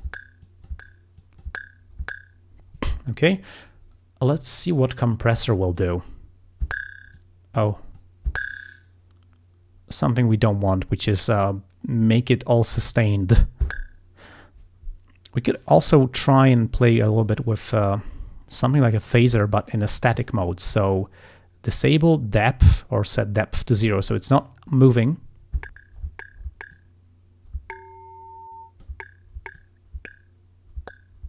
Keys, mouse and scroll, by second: 0.5 click, 1.3 click, 5.8 click, 7.2-8.2 drag, 13.1 click, 19.1 click, 21.9-23.1 drag, 26.8-29.0 drag, 29.6-31.2 drag.